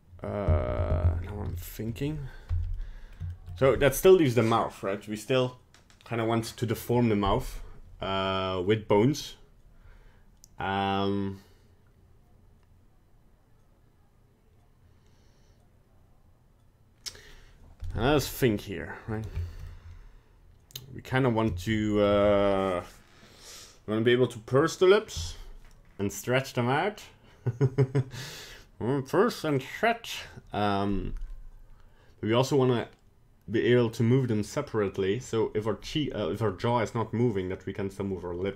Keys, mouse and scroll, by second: 1.2 scroll down 2, 1.5 shift+middle click, 2.7 middle click, 3.3 shift+middle click, 3.4 middle click, 18.0-18.4 scroll up 4, 18.4 middle click, 19.1 middle click, 19.4 shift+middle click, 19.6 middle click, 21.0 scroll down 2, 21.5 shift+middle click, 21.7 middle click.